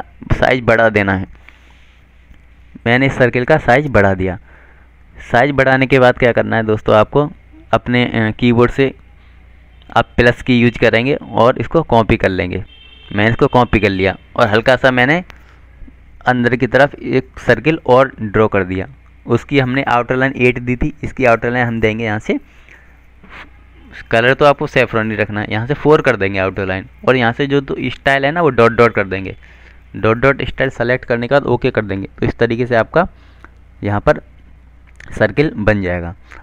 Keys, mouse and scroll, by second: 4.4 shift+click, 8.8 click, 13.3 +, 16.2 shift+click, 19.1 F12, 20.5 click, 26.6 click.